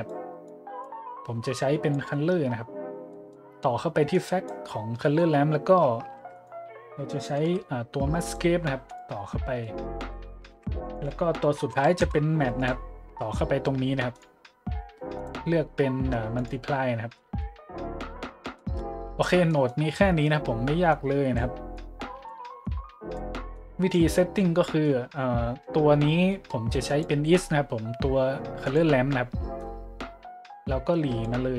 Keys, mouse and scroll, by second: 0.5 click, 1.0 middle click, 1.5 click, 3.1-3.4 middle drag, 4.1 click, 5.0-5.3 middle drag, 6.1-7.9 typing, 6.3 click, 8.2 click, 8.9-9.2 drag, 10.5-12.5 typing, 10.8 click, 12.6 click, 14.1-14.5 drag, 14.5 middle click, 15.2 click, 16.3 click, 18.9 middle click, 19.2 middle click, 19.4 middle click, 20.2 middle click, 20.9 click, 21.8 click, 22.6 click, 23.5 click, 24.1 middle click, 24.4 middle click, 24.6 middle click, 26.3-26.6 middle drag, 26.9 click, 28.6-28.9 drag, 29.6-31.2 drag.